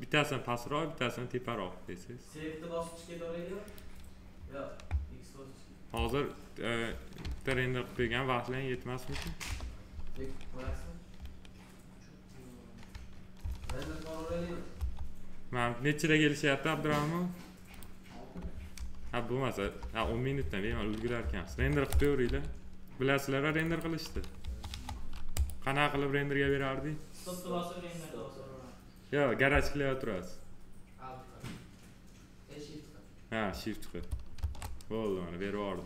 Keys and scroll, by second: 7.1 ctrl+s, 9.3 p, 13.3 ctrl+s, 14.2 F3, 19.5 Delete, 21.1 F3, 24.3 F3, 34.3 shift+q.